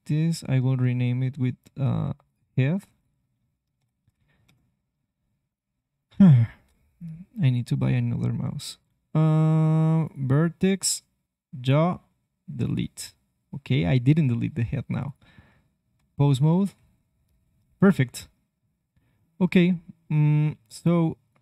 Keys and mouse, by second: 2.2-5.0 drag, 5.4-9.0 drag, 6.3 ctrl+Tab, 10.0-12.0 drag, 12.5-14.6 drag, 15.0 click, 15.4 ctrl+Tab, 16.3-17.8 drag, 16.4 r, 18.2-20.0 middle drag.